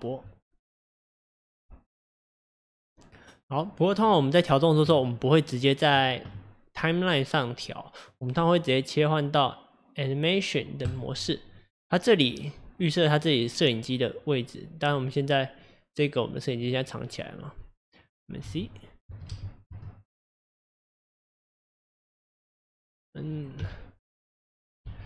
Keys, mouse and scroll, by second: 7.6 click, 14.9 scroll down 1, 15.3-16.4 scroll up 1, 16.6 click, 18.0-21.1 middle drag, 21.1 c, 23.4 middle click, 23.6 n, 24.8 n, 25.0 n.